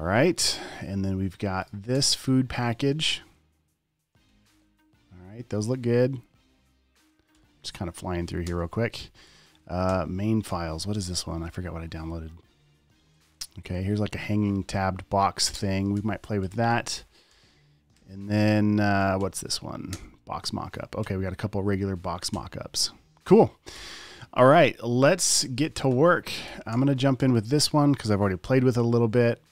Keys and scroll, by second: 2.3 space, 4.9 Down, 8.5 Down, 8.9 space, 9.2 Left, 9.5 Down, 10.3 Right, 11.3 space, 11.7 space, 14.1 Down, 15.9 space, 16.2 Left, 16.8 Down, 17.1 Left, 17.3 Down, 17.6 Right, 19.6 Down, 20.2 space, 21.9 Down, 25.6 space, 26.0 Left, 26.2 Up, 26.8 Down, 27.1 Right, 28.5 space.